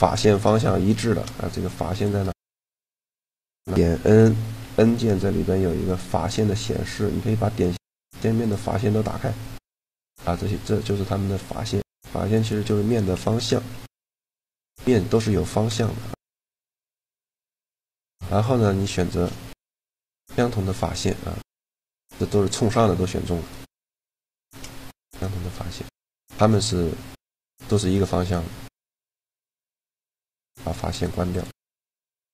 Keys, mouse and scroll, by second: 1.7-3.5 drag, 3.8 n, 4.2 n, 7.3-10.6 drag, 12.8-17.4 middle drag, 19.3 shift+g, 22.0 click, 22.2 middle click, 24.1 shift+g, 28.1-29.7 middle drag, 30.5-32.3 drag.